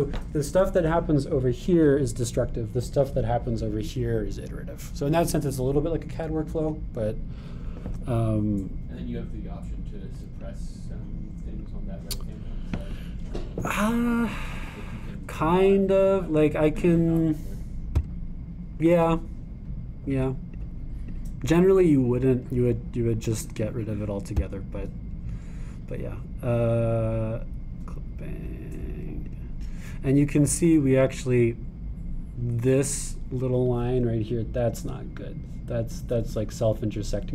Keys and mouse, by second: 11.4-12.8 drag, 15.8-19.1 drag, 21.1 click, 21.5 click, 22.1 click, 24.6 click, 25.4 click, 29.6-37.3 drag.